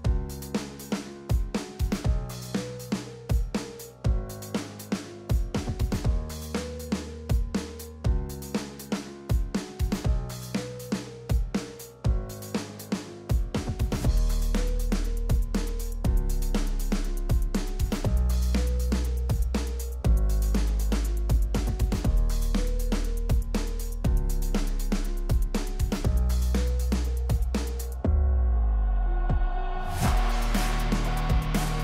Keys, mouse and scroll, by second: 2.9 click, 3.7-4.9 drag, 6.9 click, 7.3-7.7 scroll up 1, 7.9 click, 8.0-9.0 typing, 9.1-9.8 click, 10.6 click, 11.8-12.2 drag, 16.1-16.5 scroll down 1, 16.5 click, 19.0 click, 19.2 p, 19.6-21.0 drag, 23.7 drag, 28.3-29.5 drag.